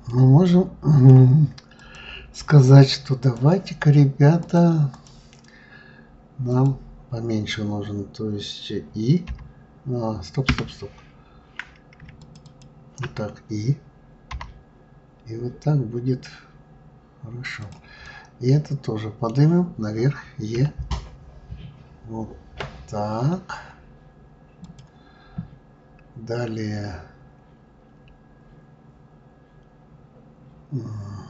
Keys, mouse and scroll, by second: 0.0-1.7 middle drag, 1.7 click, 3.2 click, 4.4-6.5 drag, 12.2 shift+click, 12.4 shift+click, 18.0-20.5 middle drag, 20.5 e.